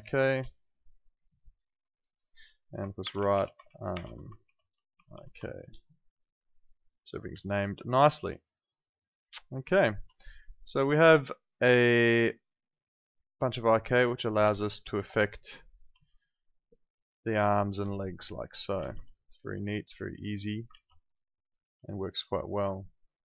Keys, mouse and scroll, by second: 0.0-0.4 typing, 1.9 click, 2.8-5.6 typing, 7.5 alt+click, 8.1 alt+middle click, 8.3 alt+right click, 8.5 alt+click, 11.5 click, 15.1 click, 16.0 alt+click, 18.9 z, 19.1 alt+click, 21.0 alt+click, 21.3 alt+middle click, 22.4 shift+right click.